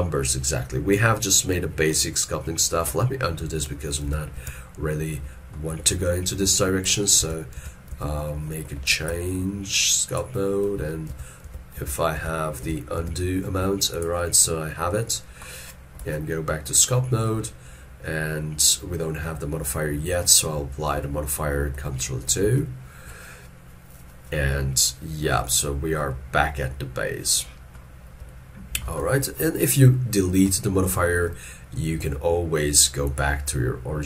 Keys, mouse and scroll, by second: 2.5 middle click, 4.1 ctrl+z, 4.4 ctrl+z, 5.6 middle click, 6.4 middle click, 7.6 ctrl+z, 9.0 ctrl+Tab, 10.1 ctrl+click, 11.1 ctrl+z, 11.5 ctrl+z, 15.5 middle click, 16.1 ctrl+Tab, 20.3 middle click, 22.4 ctrl+2, 26.2 shift+middle click, 29.0 ctrl+middle click, 29.0 ctrl+scroll down 1, 30.0 ctrl+middle click, 31.1 shift+middle click.